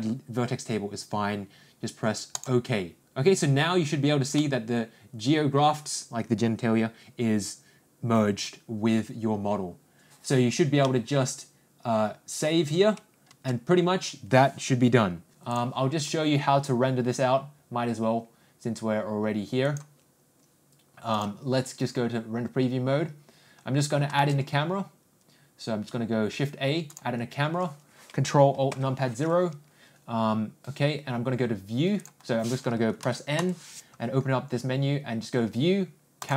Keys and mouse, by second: 4.9-10.7 middle drag, 11.3-12.9 middle drag, 15.5 click, 21.3 click, 31.9 ctrl+click, 33.0 n, 33.3 n, 36.1 click.